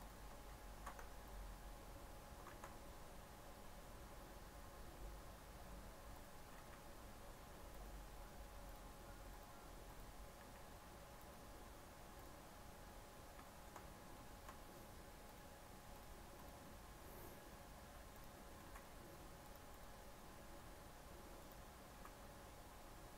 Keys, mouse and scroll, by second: 0.4 shift+s, 0.9 Tab, 1.2-2.4 right drag, 2.4 shift+a, 6.5 s, 8.6-10.3 drag, 10.3 s, 12.1-13.3 drag, 13.3-15.2 shift+middle drag, 15.2-18.5 drag, 18.5 g, 19.6 click, 21.3 click, 21.9 s.